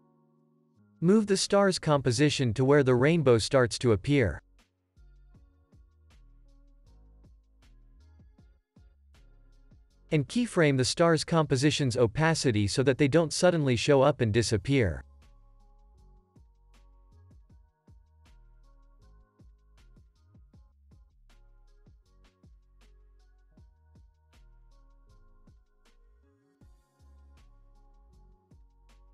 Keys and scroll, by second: 15.3 z, 16.3 0, 16.4 Return, 16.9 ctrl+s, 23.9 alt+z, 26.2 x, 27.7 ctrl+c, 28.1 ctrl+s, 28.6 space.